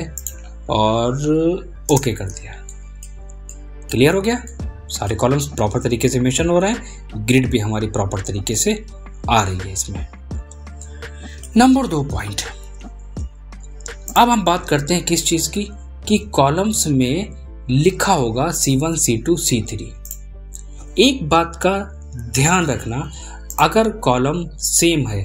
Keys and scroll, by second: 21.1 ctrl+c, 24.3 ctrl+v.